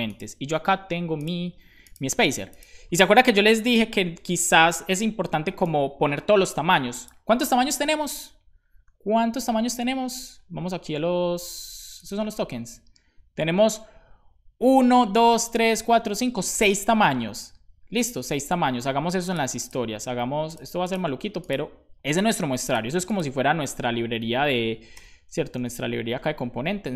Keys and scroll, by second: 24.0 super+Right, 25.1 super+b, 25.7 super+j.